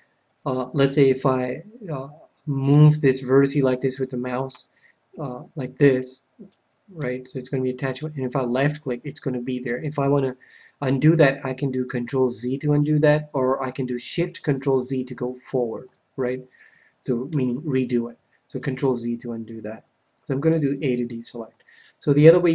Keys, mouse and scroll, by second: 2.7-4.5 right drag, 5.2-8.2 right drag, 12.2 ctrl+z, 15.0 ctrl+shift+z, 18.6 ctrl+z, 20.5 a.